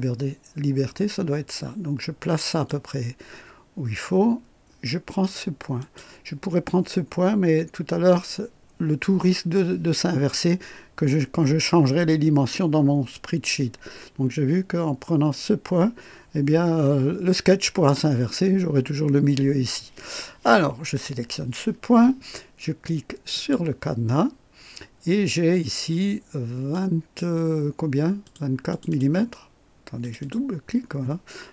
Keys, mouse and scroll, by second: 5.8 click, 23.3 click, 24.4-24.9 scroll down 1, 26.7 click, 28.2 click, 28.7 click, 30.0 click.